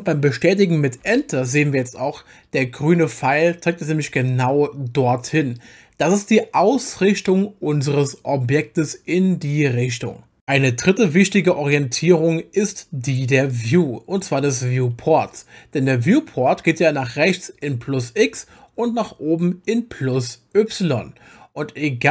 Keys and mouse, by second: 1.0 Return, 13.5-15.0 drag.